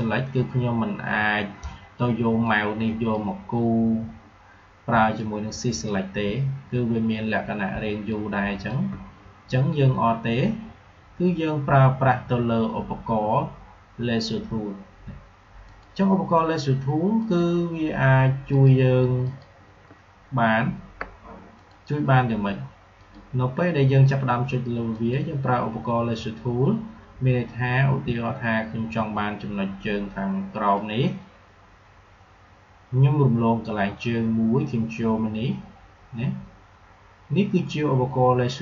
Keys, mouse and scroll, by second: 2.3-5.0 drag, 5.0-7.9 shift+drag, 7.9-10.9 shift+drag, 15.5 click, 24.6 click, 30.6-38.6 drag.